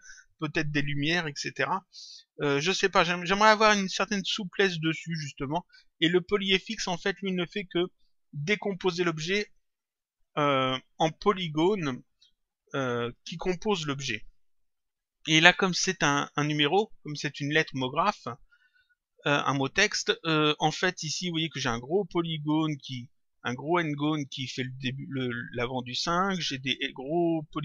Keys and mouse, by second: 15.4 click.